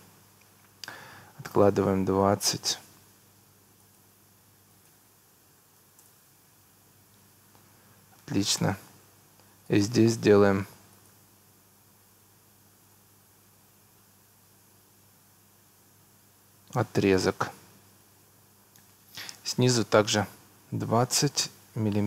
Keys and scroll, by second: 0.4 Escape, 5.6 2, 5.8 0, 6.0 Return, 7.2 Escape, 17.8 Escape.